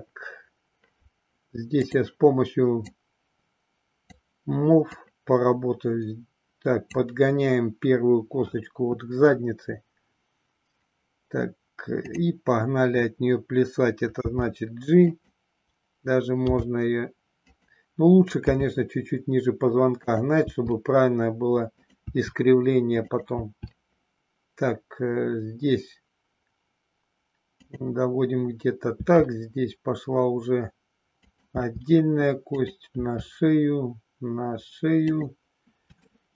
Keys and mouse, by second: 1.6 click, 2.8-4.1 drag, 4.8-6.9 drag, 14.1 g, 15.0 click, 16.4 g, 17.5 click, 18.5 e, 20.0 click, 20.4 e, 21.9 click, 22.0 e, 23.2 click, 27.5 click, 29.0 e, 31.3 click, 31.6 e, 36.0 shift+middle click.